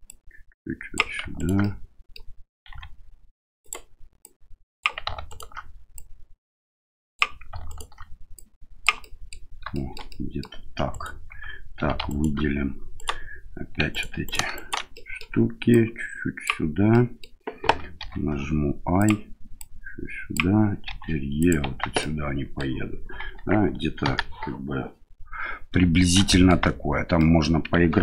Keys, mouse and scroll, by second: 0.1 click, 1.3 alt+right click, 1.6 middle click, 2.7 s, 4.2 click, 5.2 right click, 5.9-7.2 drag, 7.6 alt+right click, 8.3 click, 9.1 middle click, 9.7 shift+middle click, 10.2 middle click, 10.9 alt+right click, 11.7 3, 12.0 right click, 12.9 right click, 13.9 right click, 14.2 right click, 14.5 right click, 14.9 middle click, 15.7 click, 16.9 middle click, 18.0 i, 19.6 click, 20.8 e, 21.6 Tab, 22.0-22.6 middle drag, 24.0 KP_1, 25.9 shift+middle drag, 26.2 middle drag, 26.8 Tab, 27.1 middle click.